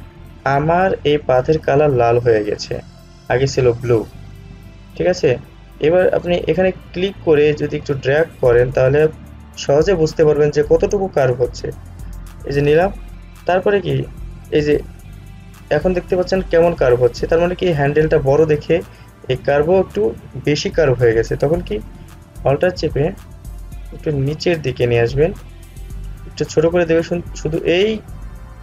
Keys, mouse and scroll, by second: 7.0-22.5 drag, 24.3-28.6 alt+drag.